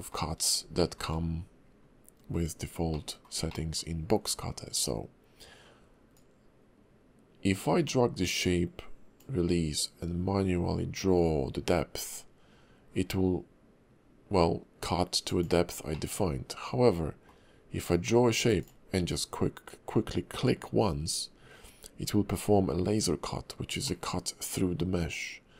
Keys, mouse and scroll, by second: 0.8 shift+middle click, 2.2-2.6 scroll up 1, 2.9 shift+middle click, 3.5 middle click, 4.4-5.2 scroll up 1, 6.1 click, 15.9 middle click, 17.9 click, 23.9 middle click.